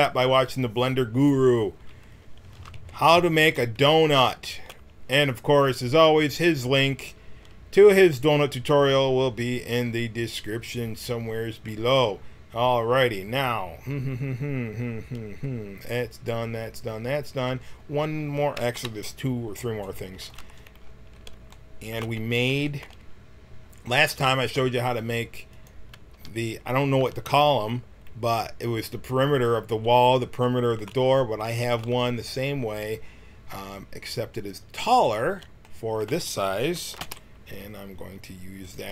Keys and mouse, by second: 2.5 a, 2.7 a, 3.3 w, 5.1 a, 18.8 KP_1, 20.4 Tab, 26.1 g, 30.4-34.7 middle drag, 34.7 click, 35.0 middle click, 35.7-37.0 drag, 37.0 shift+d, 38.6 click.